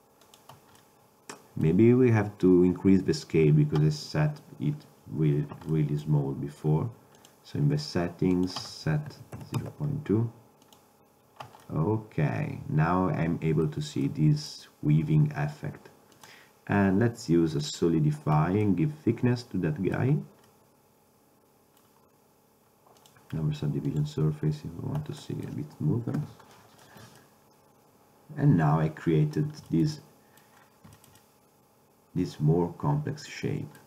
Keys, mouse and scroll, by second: 0.9-1.4 middle drag, 1.4 click, 1.6 middle click, 1.7 click, 1.7 middle drag, 2.1-2.6 middle drag, 5.8-8.8 middle drag, 11.7-13.7 middle drag, 14.2-14.7 middle drag, 16.2-18.7 drag, 19.4 middle drag, 19.6 middle drag, 19.8-21.0 middle drag, 21.1 middle click, 21.5-22.1 middle drag, 23.1-24.6 drag, 24.6 middle click, 25.4 middle click, 25.5 middle click, 26.3 a, 27.3-28.9 middle drag, 29.2-31.3 middle drag, 32.5 middle click, 32.9 middle click.